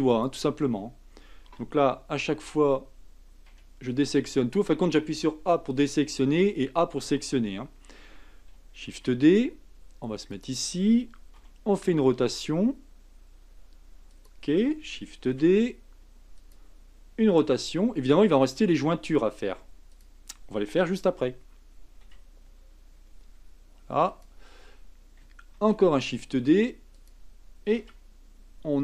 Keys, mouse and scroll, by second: 1.5 Tab, 2.4 Tab, 3.5 a, 4.0 l, 8.9 shift+d, 11.4 r, 15.3 shift+d, 17.4 r, 22.0 g, 25.5 shift+d, 27.8 r.